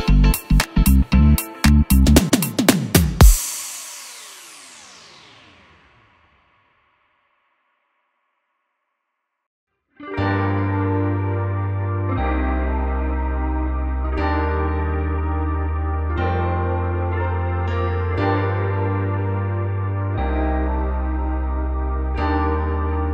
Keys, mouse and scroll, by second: 0.1 Escape, 1.4 3, 1.5 click, 1.8 x, 2.7 ctrl+r, 4.7 Escape, 4.7-8.7 middle drag, 4.9 ctrl+r, 5.5 Escape, 5.7 ctrl+r, 6.1 Escape, 6.7 ctrl+r, 7.0 Escape, 8.7 click, 8.8 shift+click, 9.6 click, 11.9-15.2 middle drag, 15.2 shift+click, 17.0 shift+click, 17.7 middle click, 18.2 shift+click, 18.4-23.1 middle drag.